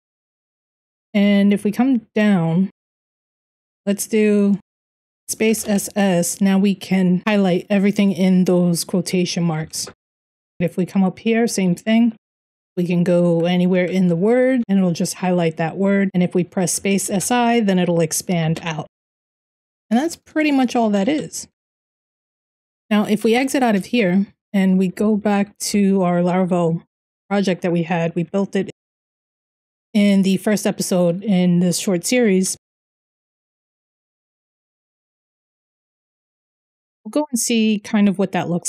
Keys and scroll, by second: 0.0-3.0 typing, 4.3-5.3 typing, 9.3 Escape, 9.6-15.1 typing, 16.4-29.5 typing, 32.0-36.2 typing, 36.8 Tab, 37.5 Return.